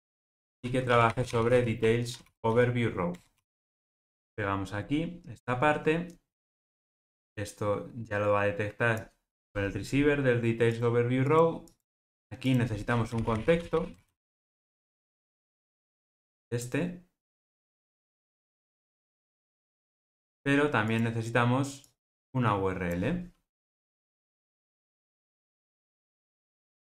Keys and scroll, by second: 0.3 alt+super+], 3.2 Return, 19.4 Tab, 24.5 Escape, 26.6 alt+Return.